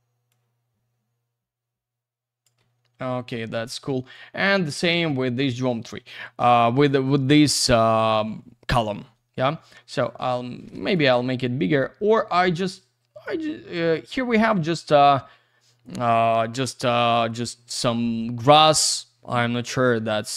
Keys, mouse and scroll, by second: 0.3 click, 2.6 F3, 4.1 shift+click, 7.8 click, 10.0 click, 10.6 Escape, 11.4 click, 13.9 click.